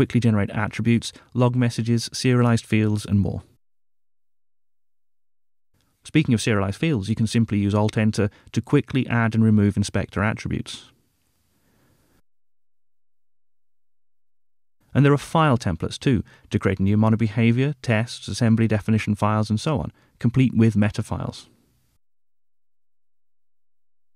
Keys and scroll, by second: 1.3 Return, 6.5 alt+Return, 11.9 alt+super+1, 13.0 alt+super+1, 15.8 super+n.